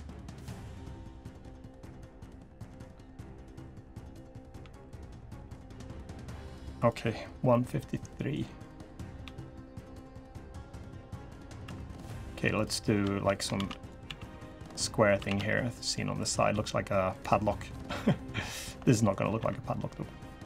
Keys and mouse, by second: 0.2 g, 2.0 click, 3.3 g, 4.3 g, 5.1 g, 6.1 g, 7.3 click, 9.0 g, 10.4 click, 10.9-11.2 drag, 11.4 3, 11.6 click, 13.3 shift+d, 13.8 s, 14.9 s, 16.1 s, 18.6 click, 19.1 e, 20.2 click.